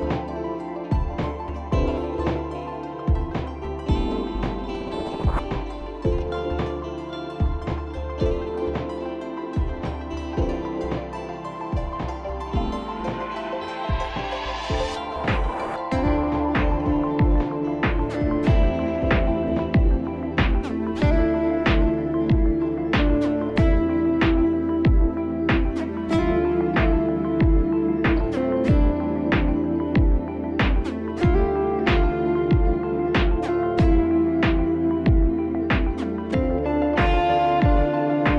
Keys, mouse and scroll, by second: 0.9 click, 1.3 right click, 2.5 click, 5.2-9.6 scroll, 9.6 click, 13.2 click, 15.5 click, 17.1 click, 17.7 click, 21.0 click, 26.3 click, 28.2 click, 29.7-30.0 alt+scroll down 1, 33.6 click, 34.5 click, 37.9 alt+click.